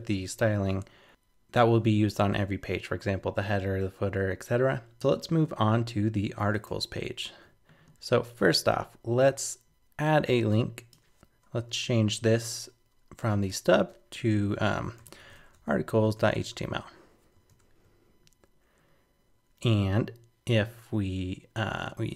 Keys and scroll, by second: 6.5 super+Tab, 17.5 super+s.